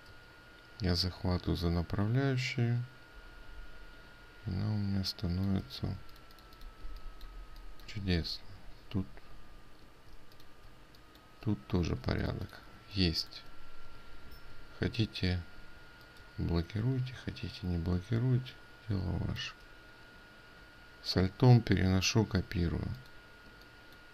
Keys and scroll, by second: 6.4 ctrl+space, 12.6 ctrl+alt+space.